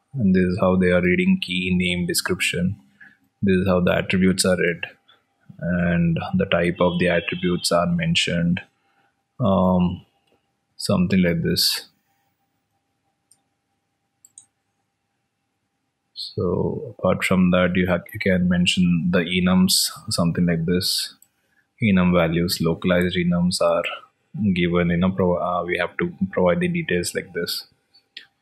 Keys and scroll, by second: 22.7 alt+Tab.